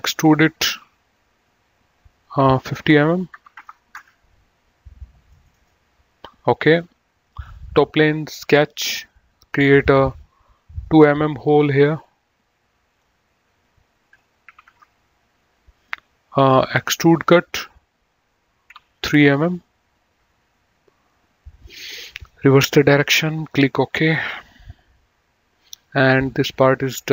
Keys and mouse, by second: 3.3 KP_5, 3.8 Return, 5.4 middle click, 7.3 click, 10.0 click, 13.0 click, 14.7 KP_2, 15.0 Return, 17.7 click, 19.5 KP_3, 20.2 Return, 22.3 click, 26.0 click, 26.9 middle click.